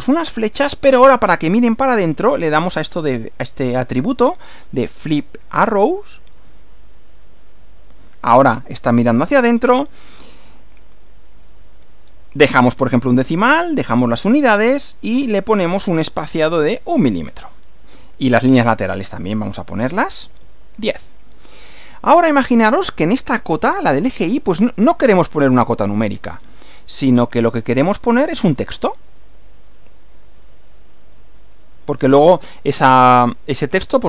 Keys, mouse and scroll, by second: 0.2 click, 1.4-2.1 drag, 5.9 click, 6.6 click, 7.4 click, 11.2 click, 12.1 scroll down 2, 13.7-14.4 drag, 14.9 click, 16.2 1, 16.6 m, 19.0 click, 20.0-20.9 typing, 21.5 click, 22.2-23.1 middle drag, 23.4-24.0 shift+middle drag, 24.2-24.8 shift+middle drag, 25.0-26.6 middle drag, 27.6 click, 29.5 click, 31.4 click.